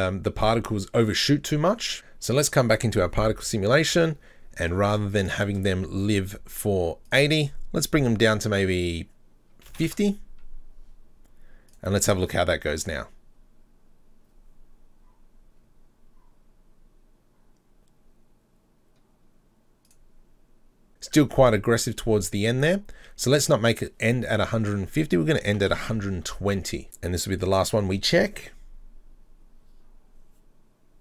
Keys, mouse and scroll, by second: 1.9 click, 2.3 right click, 3.8 click, 4.7-6.9 scroll up 26, 7.1-10.1 drag, 11.7 drag, 12.3 click, 19.9 click, 23.8-27.0 drag, 27.4 click.